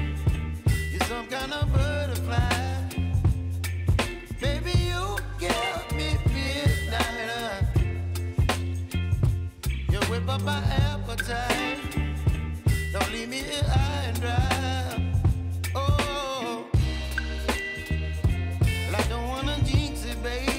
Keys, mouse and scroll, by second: 0.7-10.9 drag, 11.7 ctrl+alt+Home, 13.1-16.8 drag, 18.3 F4, 18.9 click.